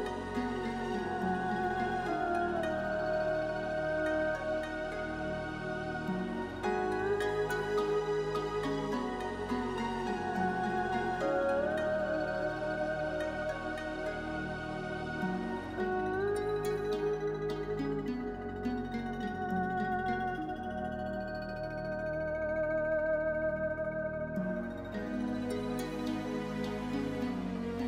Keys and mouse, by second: 0.3 shift+click, 0.6 middle click, 1.6 KP_1, 2.1 shift+click, 8.5 click, 13.5 click, 18.2 click, 23.0 click, 27.7 click.